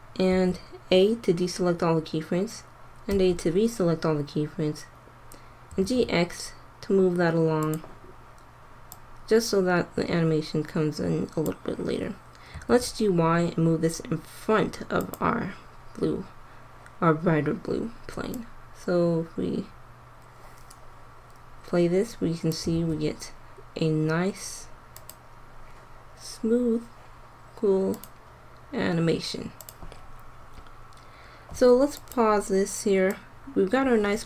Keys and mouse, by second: 0.3 a, 3.0 a, 5.6 g, 9.0-10.8 drag, 12.4 g, 18.4 click, 20.4 click, 22.7 alt+a, 25.0 click, 28.0-30.1 drag, 30.3 click, 30.7 click, 31.3 middle click, 33.6-34.2 drag.